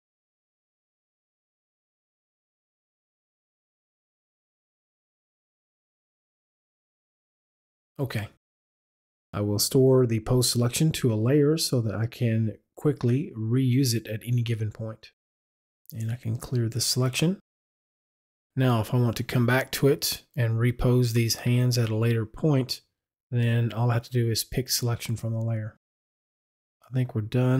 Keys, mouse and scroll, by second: 1.1 click, 3.4 click, 5.6 click, 12.7 click, 16.2 click.